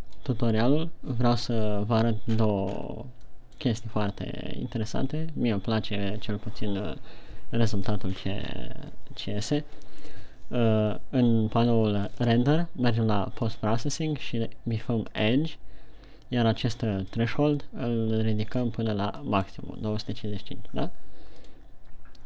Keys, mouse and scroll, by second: 4.8 middle click, 4.8-6.2 scroll up 7, 15.5 click, 17.7 click, 20.2 click.